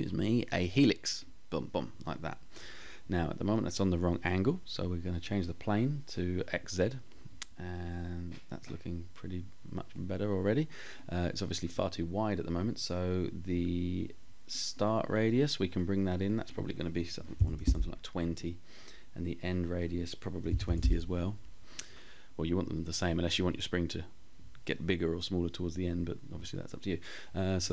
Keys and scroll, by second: 16.2-17.1 typing, 19.3-20.2 typing, 27.3 Up.